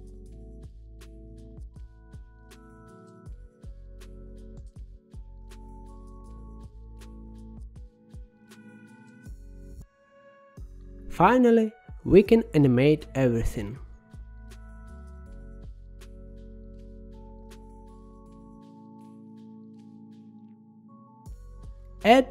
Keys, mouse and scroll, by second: 0.2-1.4 middle drag, 1.8-2.8 drag, 5.6 click, 6.4-7.1 scroll down 2, 7.1-8.1 scroll up 3, 8.4-10.6 drag, 10.6-12.6 middle drag, 12.8-14.8 scroll down 21, 14.8-17.5 middle drag, 17.5-18.8 scroll up 10, 18.8 click, 20.1 g, 20.7 middle click, 21.3-21.8 scroll up 6.